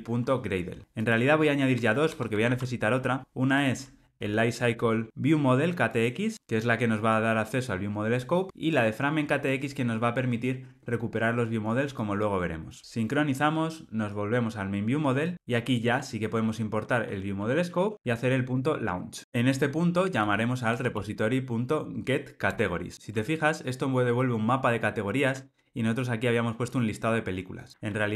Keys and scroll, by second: 2.4 super+v, 4.0 alt+Return, 15.8 alt+Return, 20.7 Return.